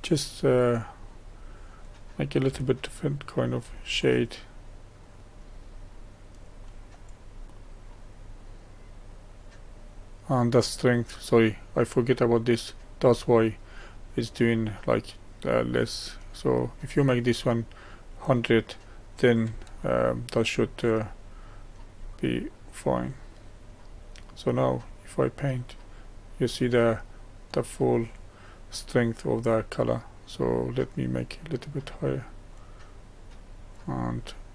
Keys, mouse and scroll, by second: 2.7-5.0 shift+middle drag, 5.0-7.4 drag, 7.4-8.4 middle drag, 8.4-14.0 drag, 18.0-21.9 middle drag, 21.9-22.5 scroll down 1, 22.5 scroll down 1, 22.6 middle click, 23.4-24.8 scroll up 2, 24.8-27.8 drag, 30.8-34.5 drag.